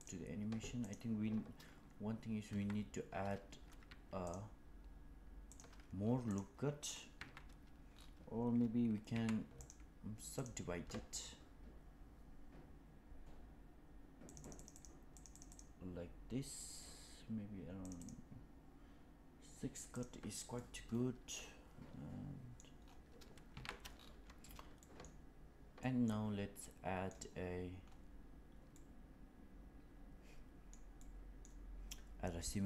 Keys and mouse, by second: 0.0 click, 2.4 Tab, 3.8 Tab, 4.1 click, 5.4 click, 6.2 click, 7.1 Tab, 9.0 a, 9.6 right click, 14.2 click, 14.3 click, 14.5 click, 14.7 click, 15.0 click, 15.2 click, 15.4 click, 17.7 click, 17.9 click, 19.9 click, 20.5-22.5 middle drag, 23.4 Tab, 24.7 middle drag, 25.8 middle click, 26.6-27.0 middle drag, 28.7-30.7 middle drag, 30.9-31.4 middle drag.